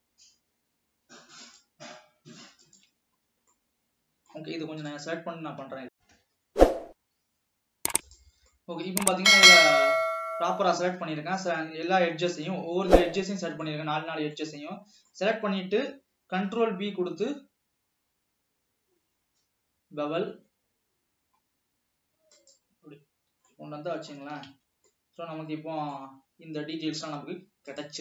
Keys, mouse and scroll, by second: 0.1 scroll up 2, 1.6 shift+click, 2.8 shift+click, 3.4 scroll down 1, 3.7-5.9 middle drag, 5.9-6.5 scroll up 1, 6.5 scroll up 1, 8.6-10.1 middle drag, 10.1 scroll up 1, 11.1 scroll up 1, 12.3 scroll down 1, 13.4-15.7 middle drag, 15.7 scroll up 1, 16.8 ctrl+b, 23.0-23.3 scroll down 4, 23.7-24.4 middle drag, 24.4 alt+a, 24.8 Tab, 25.1-28.0 middle drag.